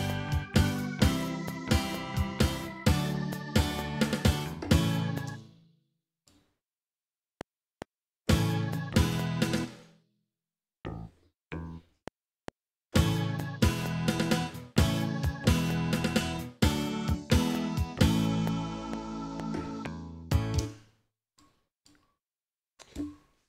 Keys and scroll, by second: 5.3 space, 7.2 F7, 9.6 space, 10.1 z, 20.6 space, 23.0 j.